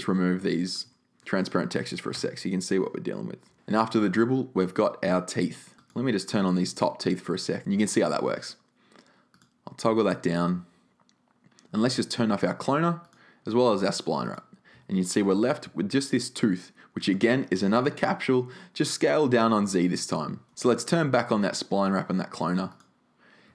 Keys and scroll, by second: 1.2 BackSpace, 3.4 super+z, 22.0 super+z.